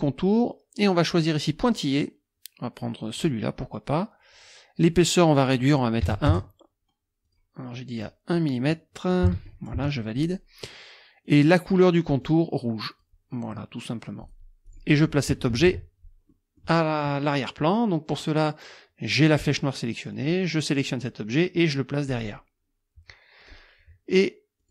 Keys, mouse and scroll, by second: 1.2 click, 3.2 click, 6.0 KP_1, 6.3 KP_Enter, 7.3 click, 8.0 click, 8.3 click, 9.3 KP_1, 9.7 KP_Enter, 11.3 click, 12.3 click, 14.2 click, 14.7 click, 15.3 KP_Subtract, 16.3 click, 19.2 click, 20.1 click, 22.1 click, 23.4 click, 24.6 click.